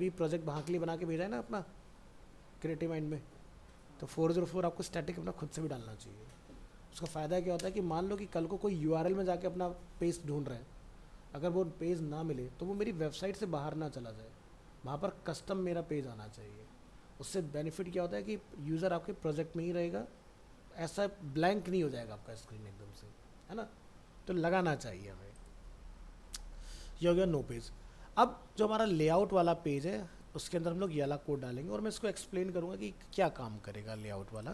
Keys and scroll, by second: 25.6 alt+Tab, 31.3 ctrl+c, 32.1 alt+Tab.